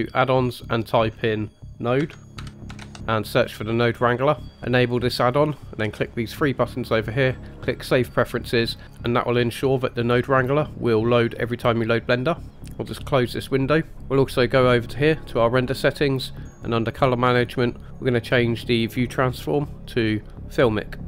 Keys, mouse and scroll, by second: 13.9 click, 16.4 click, 16.9-18.0 scroll down 1, 18.0-19.4 scroll down 1, 19.4-20.7 drag.